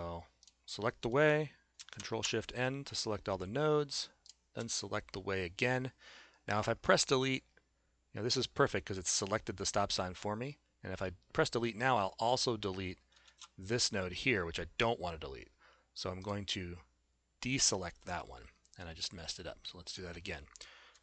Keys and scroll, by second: 2.0 ctrl+shift+n, 13.3 shift+z.